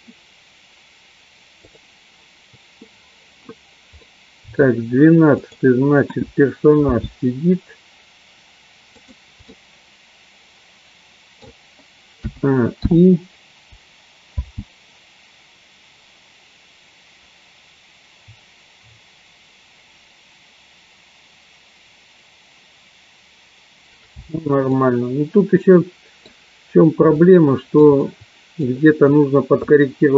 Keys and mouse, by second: 4.2 middle click, 5.6 click, 6.9 g, 9.6-11.6 middle drag, 13.2 i, 14.4 space, 25.1-26.3 middle drag, 25.1 space, 27.3 shift+middle click, 28.2 middle click.